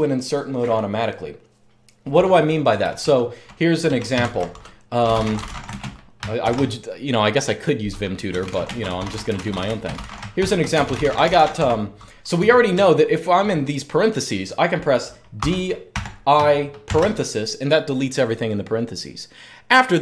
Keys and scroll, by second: 2.6-6.2 typing, 7.8-13.5 typing, 15.1-18.2 typing.